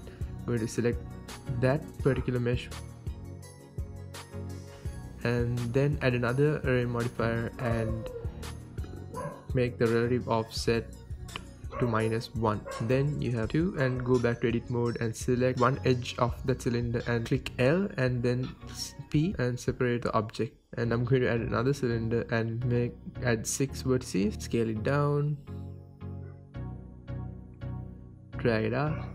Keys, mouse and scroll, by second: 0.5 click, 0.9-1.6 drag, 1.6 Tab, 1.9 click, 2.5 l, 3.2 p, 4.6 Tab, 4.8 click, 5.4-9.2 drag, 8.0 KP_Enter, 9.4-9.8 drag, 9.8-12.0 middle drag, 10.1 scroll down 2, 12.0 click, 12.7 click, 13.0 KP_1, 13.4 scroll up 2, 13.7-14.5 drag, 14.6 Tab, 14.8 click, 15.3 l, 15.7 p, 16.6 Tab, 16.9-17.4 drag, 17.4 g, 17.8 right click, 18.4 scroll down 1, 18.7-19.0 scroll up 1, 19.0 shift+a, 20.2-21.0 scroll down 2, 21.2 click, 21.7-23.6 drag, 22.9 KP_Enter, 23.9-24.2 scroll up 2, 24.2 s, 24.4-24.9 right drag, 24.9-25.2 drag, 25.2 scroll down 2, 25.4-26.2 drag, 26.2 g, 26.8 click, 26.9 scroll, 27.2 s, 27.8 click, 28.0 shift+middle click, 28.3 s, 28.8 click, 28.9 scroll.